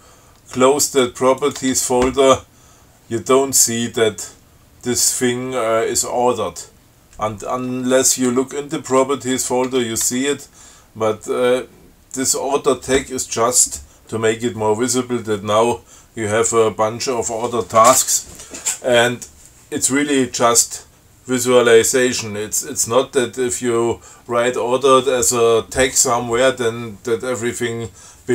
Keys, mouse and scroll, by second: 0.0 click, 1.2 click, 1.7 click, 1.9 Tab, 8.5 Tab, 9.7 Tab.